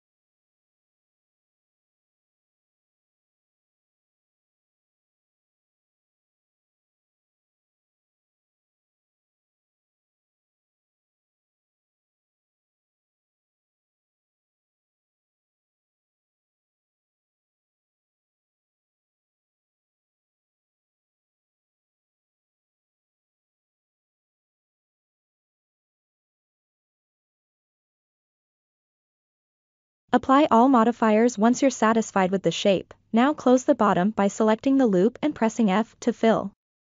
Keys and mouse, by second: 1.7 ctrl+r, 4.1-4.7 middle drag, 5.3 click, 6.2 KP_1, 7.5-9.0 drag, 9.9-10.4 ctrl+middle drag, 10.7-11.1 shift+middle drag, 14.2 click, 14.9-16.4 drag, 18.8-19.3 ctrl+middle drag, 19.7-20.1 shift+middle drag, 25.5 click, 29.2 Tab, 30.2 q, 31.7-32.0 ctrl+middle drag, 32.2 shift+middle drag, 32.6 Tab, 33.0-33.8 middle drag, 34.3 alt+click, 35.5 f, 36.5 i.